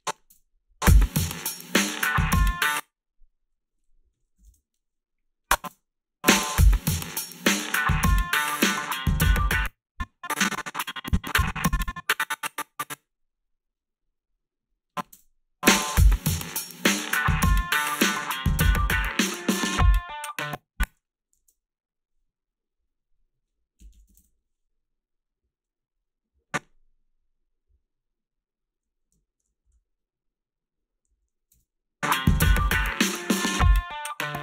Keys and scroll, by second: 0.3 space, 2.5 space, 4.2 -, 4.5 Return, 4.5 1, 5.7 space, 9.4 space, 15.2 space, 20.3 space, 21.4 alt+shift+s, 23.6-24.6 typing, 29.7 Return, 29.7 r, 31.1 a, 31.5 space, 31.6 a, 34.2 space.